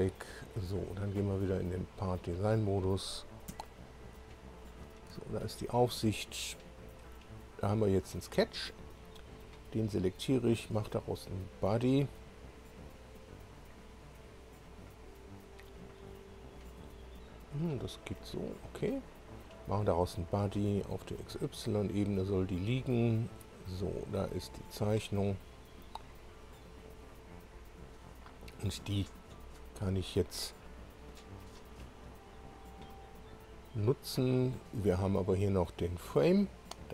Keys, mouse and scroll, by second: 1.2 click, 2.2 click, 2.6 click, 3.5 1, 4.1 2, 5.4 shift+click, 6.9 click, 7.8 scroll down 2, 8.6 click, 10.6 click, 13.4 click, 14.6 click, 18.0 click, 19.4 click, 20.5 click, 21.2 click, 23.9 scroll down 1, 24.4 scroll up 1, 25.2-25.8 scroll down 4, 26.4 click, 30.6 scroll up 2, 31.9 scroll down 2, 34.4-35.0 scroll up 2, 35.1-35.4 scroll down 2, 36.2 click.